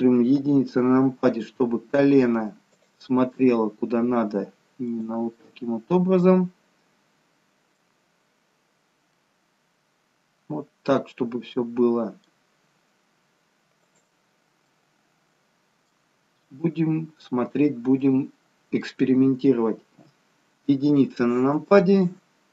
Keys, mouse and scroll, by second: 0.4 KP_1, 2.7 click, 3.4 g, 5.4 middle click, 9.2 middle click, 12.7 g, 14.8 middle click, 20.0 KP_1.